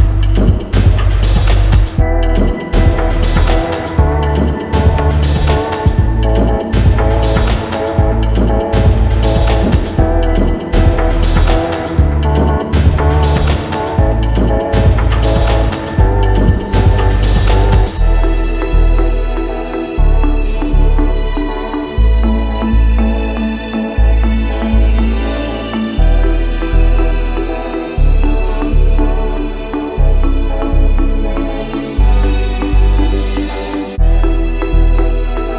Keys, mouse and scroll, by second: 0.7 click, 3.6 click, 4.1 middle click, 5.3 ctrl+j, 6.2 middle click, 6.4 middle click, 6.4 middle click, 6.6 middle click, 6.9 middle click, 7.0 middle click, 7.1-7.4 scroll, 7.5 m, 8.3 click, 8.9 click, 9.0-9.6 scroll, 9.7-10.3 scroll, 10.9 click, 11.6 click, 12.0 a, 12.3-13.2 scroll, 12.7 middle click, 13.4 q, 13.8 middle click, 14.7 middle click, 14.8 middle click, 15.6 click, 16.2 ctrl+h, 16.8 click, 17.6 middle click, 18.9 scroll up 1, 20.0-20.4 scroll up 1, 20.4-21.3 scroll down 6, 21.4 scroll, 24.7-25.6 alt+scroll, 25.6 click, 27.1 ctrl+h, 27.5 ctrl+j, 28.0 ctrl+j, 28.5 ctrl+k, 28.8 click, 29.7 alt+middle click, 30.4 middle click, 31.3 click, 31.9 right click, 33.2 click, 33.7-34.4 scroll.